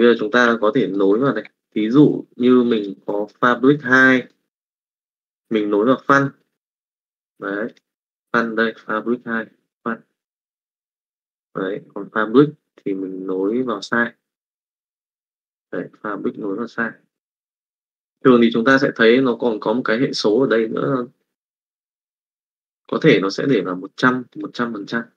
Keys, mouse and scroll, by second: 0.4 d, 0.8 click, 1.1 click, 2.0 middle click, 2.8 click, 3.0 middle click, 4.3 click, 5.3 middle click, 10.8 middle click, 11.5 click, 13.6 middle click, 17.8 click.